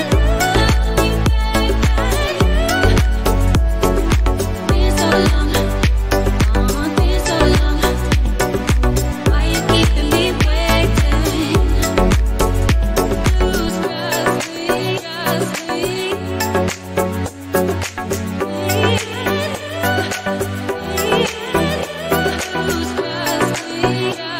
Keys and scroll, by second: 1.8 space, 5.6 space, 6.1 n, 6.6 o, 7.1 w, 15.4 f, 18.1 Return.